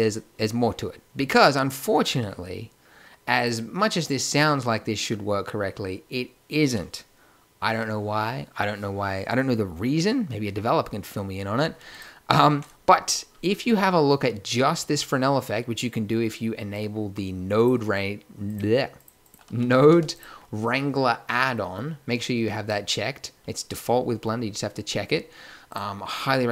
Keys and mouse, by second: 5.3-11.9 middle drag.